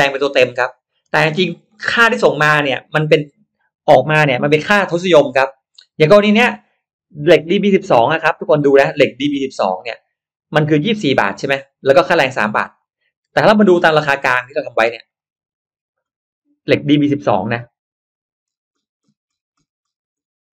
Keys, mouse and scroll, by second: 0.8 click, 7.5 click, 13.4-14.2 drag, 15.1 click, 18.4 middle click, 19.5 middle click.